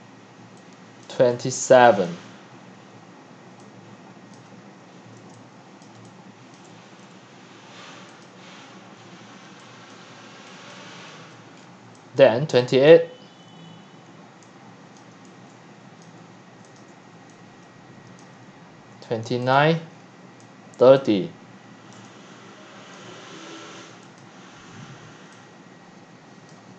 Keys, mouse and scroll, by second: 1.7 click, 2.1 click, 2.3 middle click, 2.8-6.5 typing, 5.8 click, 8.0-13.3 typing, 8.2 click, 9.0 middle click, 9.0-9.4 scroll, 9.9 click, 11.5 click, 12.2 click, 12.9 click, 13.6 click, 14.4-18.9 typing, 16.0 click, 16.8-17.3 drag, 18.5-18.9 drag, 19.6-20.0 drag, 20.4-22.9 typing, 21.2 click, 21.6 click, 24.2-25.3 drag, 25.3-26.7 typing.